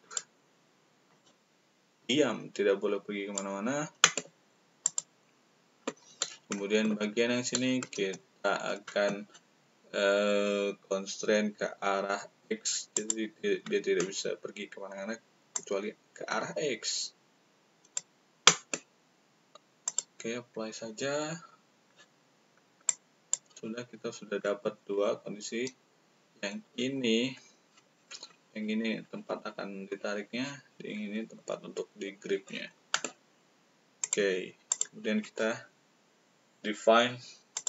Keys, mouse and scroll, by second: 0.1 click, 1.0-3.9 drag, 1.0-3.9 right drag, 4.9 click, 4.9 right click, 12.9 click, 15.5-17.9 drag, 15.5-17.9 right drag, 19.8 click, 22.8-23.3 drag, 34.0 click, 34.6 click, 37.5 click.